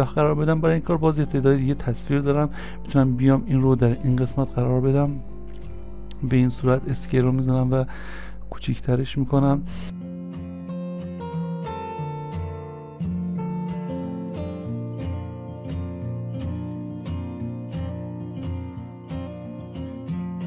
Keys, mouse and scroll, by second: 6.7 s, 12.0 s, 15.8 s.